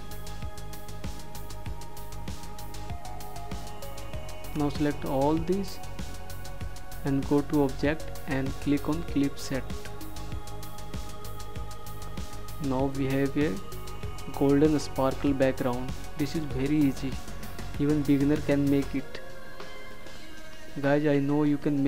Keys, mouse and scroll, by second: 13.8 -, 18.0 click.